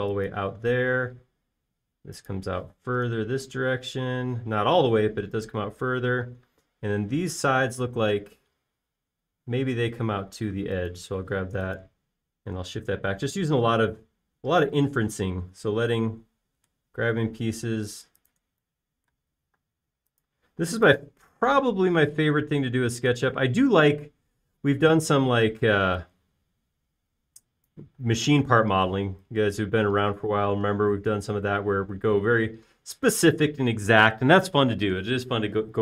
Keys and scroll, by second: 2.5 space, 3.9 m, 7.5 space, 12.9 m, 21.1 space, 21.9 m, 24.9 p, 30.4 typing.